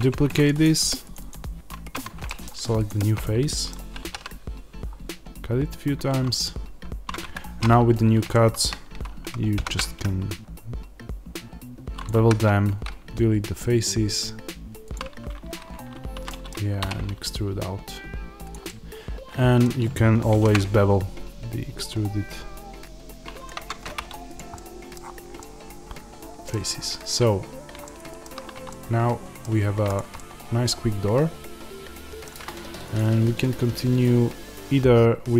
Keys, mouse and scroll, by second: 0.4 click, 1.8 Tab, 2.2 middle click, 2.8 click, 3.4-12.0 middle drag, 3.9 ctrl+r, 7.2 Escape, 7.9 scroll up 1, 9.5 ctrl+b, 12.0 click, 12.1 x, 16.2-18.4 middle drag, 16.7 e, 18.4 click, 18.6-23.3 middle drag, 20.2 ctrl+b, 23.3 click, 23.5 Tab, 24.3 click, 24.4-29.8 middle drag, 24.9-25.3 scroll down 1, 26.6-27.3 scroll up 1, 27.3 scroll down 1, 29.3 scroll down 1, 29.8 click, 30.0-32.8 middle drag, 32.8 click.